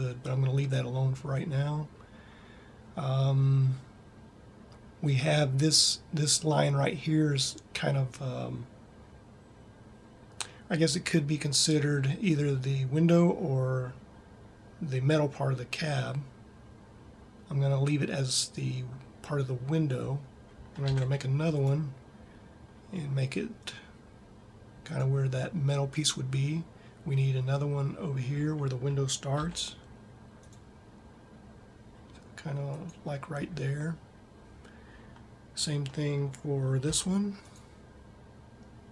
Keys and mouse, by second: 21.0 ctrl+r, 29.2 ctrl+r, 37.3 ctrl+r.